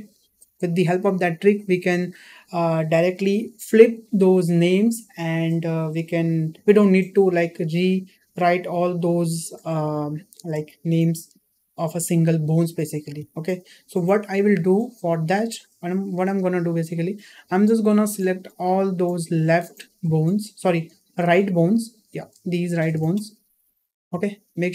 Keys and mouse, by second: 14.7-15.2 shift+middle drag, 15.8 shift+middle drag, 18.4-19.4 drag, 20.1-20.7 shift+drag, 21.8 shift+click, 22.6 shift+click, 23.2 shift+drag, 24.1-24.4 shift+middle drag.